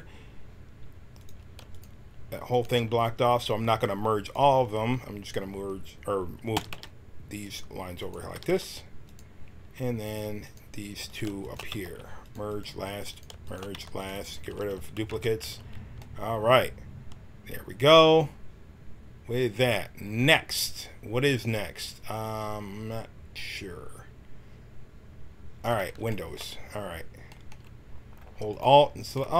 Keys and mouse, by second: 1.1-6.5 drag, 6.5 g, 7.9-9.7 drag, 8.3 g, 10.4-11.5 drag, 12.2 w, 13.7-15.4 typing, 28.4-29.3 right drag.